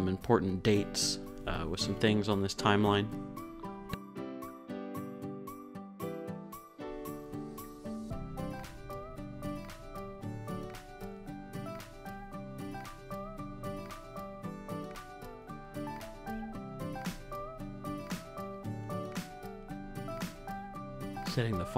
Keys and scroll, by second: 1.9 shift+Down, 2.2 shift+Up, 3.2 Right, 3.6 Up, 3.8 Right, 5.0 t, 6.1-14.6 typing, 11.4 Return, 15.9 Down, 16.7 Down, 17.2 Up.